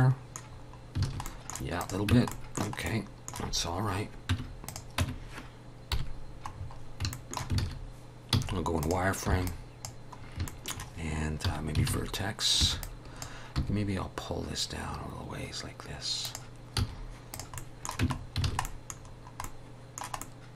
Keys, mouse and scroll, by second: 0.5-1.0 scroll down 4, 1.1 alt+a, 1.3 middle click, 1.8 click, 2.1 Tab, 2.3 middle click, 2.8 scroll up 1, 3.0 middle click, 4.3 Tab, 4.7 click, 5.0 Tab, 5.9 KP_7, 6.5 scroll up 4, 7.1 shift+middle click, 7.6 alt+a, 8.3 z, 9.3 b, 10.2 scroll up 2, 10.5 shift+middle click, 11.5 1, 11.9 alt+a, 12.6 b, 13.6 g, 16.8 z, 17.6 middle click, 18.0 Tab, 18.2 scroll down 3, 18.5 alt+a, 18.6 middle click, 19.0-19.4 scroll down 2, 19.4 middle click, 20.2 middle click.